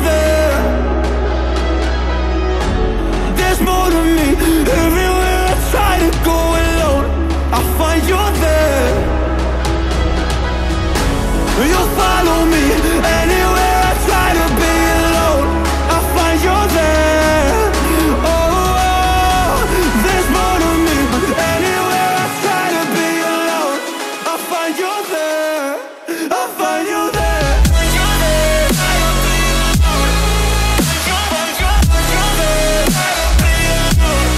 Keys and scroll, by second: 10.7-13.6 typing, 15.4-16.7 typing, 19.5 shift+c.